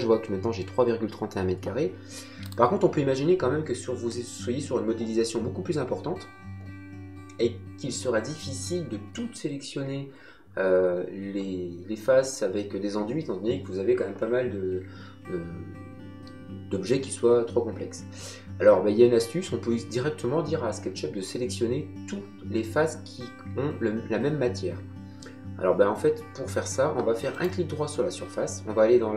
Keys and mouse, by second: 2.4 click, 27.3 right click.